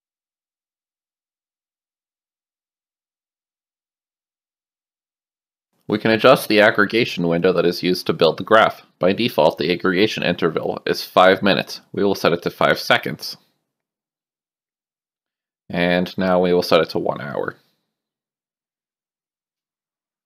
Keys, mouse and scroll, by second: 0.8 right click, 2.4 right click, 6.1 click, 8.5 click, 9.4 BackSpace, 11.0 click, 11.9 KP_5, 12.5 click, 15.9 click, 17.1 click, 18.0 KP_0, 18.7 click, 19.1 KP_1, 19.5 click.